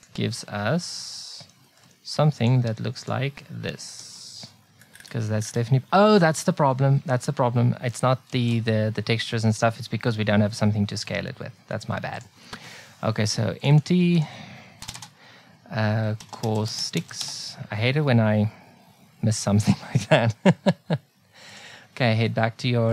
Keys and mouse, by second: 1.1 middle click, 2.4-4.1 drag, 7.0 shift+s, 8.3 shift+a, 13.6-15.7 drag, 20.0-21.5 right drag.